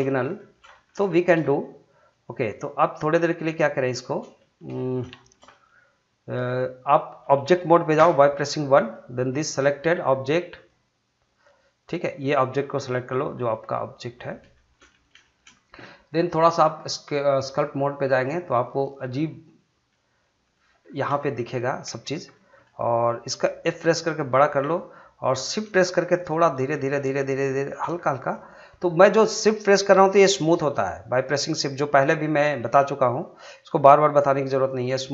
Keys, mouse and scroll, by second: 0.1 scroll up 1, 0.4 shift+middle click, 0.7 middle click, 1.1 shift+middle click, 1.4 middle click, 2.5 click, 3.8 middle click, 4.4 shift+middle click, 4.8 middle click, 5.2 shift+middle click, 5.5 middle click, 8.0 Tab, 8.4 middle click, 8.8 click, 12.8-14.2 middle drag, 14.2 scroll up 1, 14.5 shift+middle click, 15.2 shift+middle click, 16.4 click, 19.9 middle click, 20.8 scroll up 1, 21.2 shift+middle click, 21.5 scroll down 1, 21.9 shift+middle click, 23.6 f, 24.6 click, 26.0 shift+click, 26.0 shift+click, 27.9 scroll down 1, 28.3 middle click.